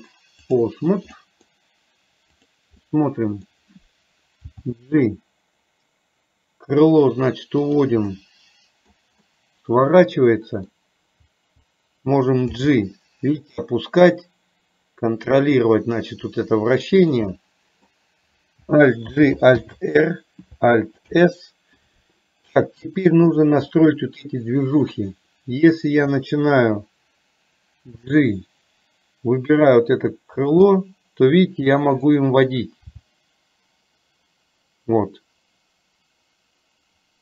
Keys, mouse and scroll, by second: 1.3 middle drag, 3.0-3.5 middle drag, 4.5 g, 8.3 middle click, 9.4-10.8 middle drag, 11.3 g, 17.4-18.0 middle drag, 19.2 alt+g, 19.7 alt+r, 23.8-25.0 middle drag, 28.0 g, 30.7-32.2 middle drag, 33.0 g.